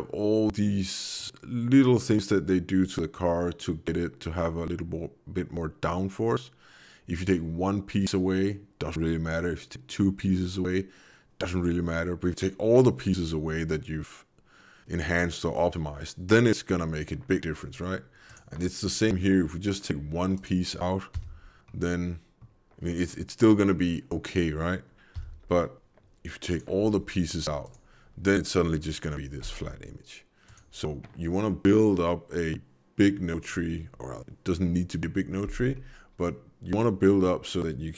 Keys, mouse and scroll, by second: 18.3 click, 18.9 middle click, 20.3 click, 21.1 m, 21.7 middle click, 25.2 m, 26.5 click, 27.6 click, 34.5 middle click, 35.2-35.6 scroll down 3, 35.6 middle click, 36.7 middle click.